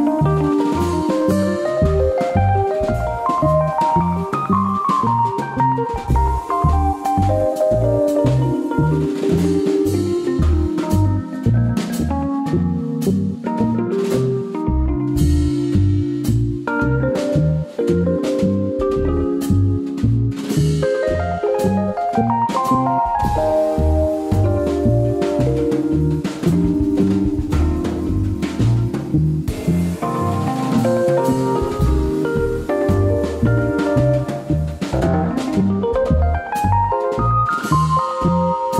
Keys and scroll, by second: 3.9 super+d, 9.8 alt+BackSpace, 10.0 super+d, 11.0 super+d, 13.5 alt+BackSpace, 13.7 super+d, 14.7 super+z, 15.5 super+d, 16.5 alt+BackSpace, 16.6 super+d, 21.7 alt+BackSpace, 21.8 super+d, 26.6 super+-, 26.8 super+=, 36.6 super+=.